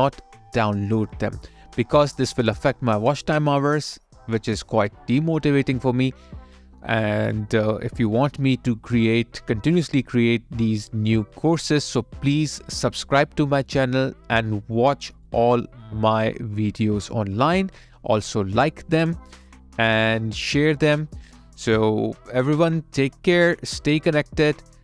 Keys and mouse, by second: 3.8 alt+click, 6.0 alt+middle click, 7.3 alt+right click, 9.2 alt+click, 19.4 alt+right click, 20.5 alt+middle click, 21.9 alt+click.